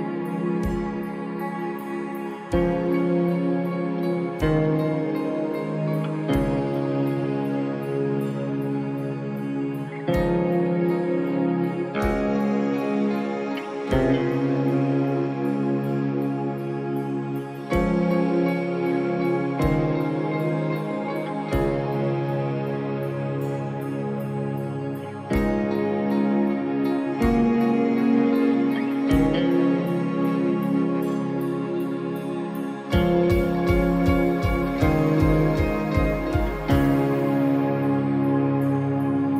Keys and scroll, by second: 5.9 space, 24.4 space, 29.7 space, 31.8 space, 32.3 ctrl+d, 32.5 ctrl+-, 33.2 space, 33.4 ctrl++, 36.9 space.